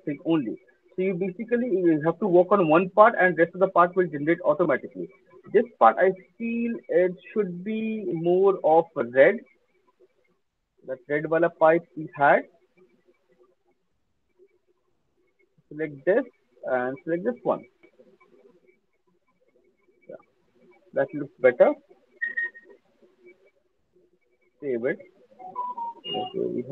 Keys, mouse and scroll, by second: 0.2 alt+middle click, 0.5 alt+middle click, 0.7 alt+middle click, 0.7 alt+right click, 1.3 alt+click, 2.0 alt+middle click, 2.4 alt+middle click, 2.8 alt+middle click, 3.2 alt+middle click, 3.9 alt+click, 4.1 alt+middle click, 4.5 alt+click, 4.9 alt+middle click, 6.6 click, 6.9 click, 7.2 alt+click, 7.2 alt+right click, 7.8 click, 8.2 click, 8.8 alt+click, 10.7-12.3 scroll, 13.3 click, 14.0 click, 15.0 middle click, 15.5 click, 17.0 click, 18.8 click, 21.3 alt+click, 23.8 ctrl+s.